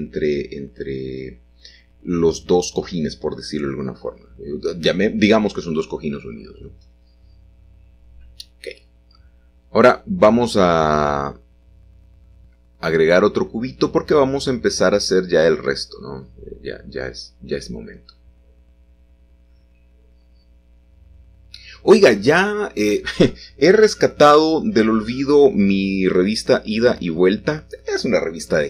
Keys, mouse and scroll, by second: 0.1 h, 0.5 middle click, 2.7-3.8 middle drag, 3.4-5.3 scroll up 1, 5.3-6.1 shift+scroll up 1, 6.1 shift+middle click, 6.9 shift+a, 9.1 click, 9.4 Tab, 11.2 shift+a, 11.8-12.9 drag, 13.5 shift+z, 17.6-18.7 drag, 19.1 s, 20.6-21.7 drag, 21.9 s, 22.2 y, 25.3-26.8 drag, 26.8 middle click, 28.2 g, 28.4 y.